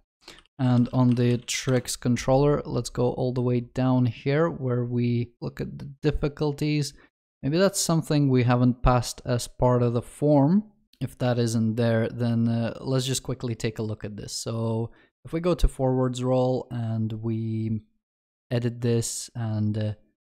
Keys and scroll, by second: 0.1 ctrl+shift+n.